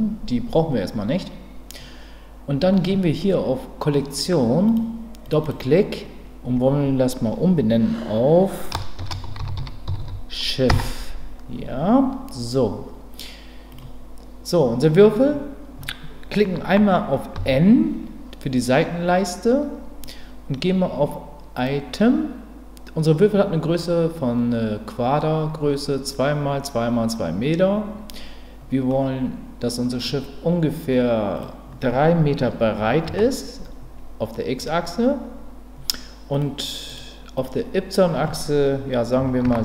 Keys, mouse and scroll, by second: 4.6 click, 5.4-12.9 drag, 10.0 f, 13.7 click, 17.3 n, 21.6 click, 28.9-30.0 middle drag, 31.3-34.0 drag, 36.5 click, 37.3-39.6 drag.